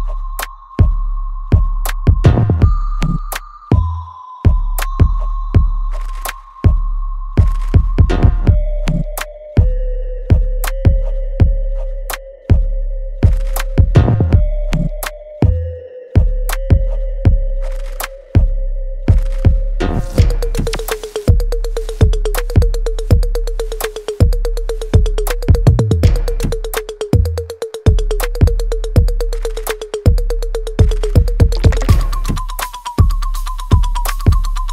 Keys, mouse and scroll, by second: 2.0 shift+click, 2.9 ctrl+z, 3.9 shift+click, 5.5 alt+right click, 5.9 alt+click, 6.3 alt+middle click, 6.8 alt+right click, 7.7 shift+click, 12.6 alt+click, 13.3 alt+right click, 14.0 shift+click, 19.2 ctrl+z, 19.8 shift+click, 20.6 ctrl+z, 22.0 ctrl+click, 24.5 ctrl+z, 25.0 shift+click, 26.4 shift+click, 28.8 shift+click, 29.4 alt+right click, 31.6 alt+click, 32.8 alt+middle click, 33.2 alt+click, 34.2 alt+middle click.